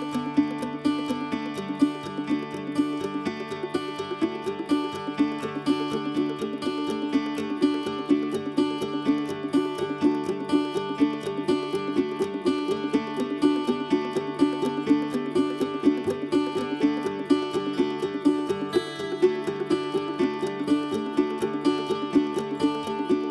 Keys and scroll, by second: 1.1 ctrl+s, 9.1 ctrl+z, 9.5 ctrl+s, 15.0 ctrl+s, 16.1 ctrl+s.